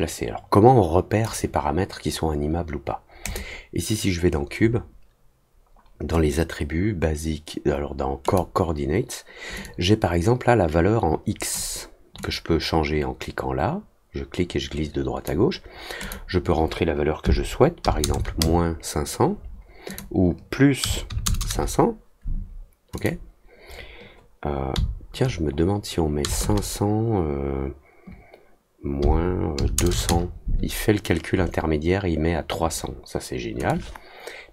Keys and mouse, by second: 3.2 click, 8.2 click, 9.6-11.5 drag, 12.2-15.2 drag, 16.0 click, 19.8 click, 22.9 click, 33.6-34.5 drag.